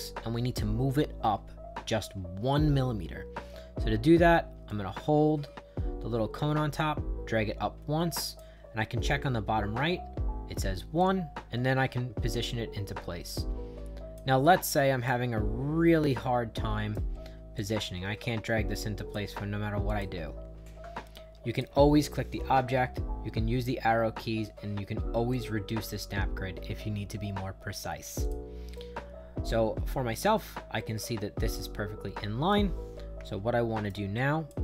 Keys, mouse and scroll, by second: 4.7-8.4 drag, 11.0-14.2 drag, 14.4 right click, 15.4 middle click, 15.9 middle click, 16.2 right click, 17.1 middle click, 17.6-19.1 drag, 19.9 click, 21.5 click, 22.7 Down, 23.3 Right, 25.3 click, 28.2 click, 28.8-32.5 right drag, 33.3 shift+right click, 34.2 click.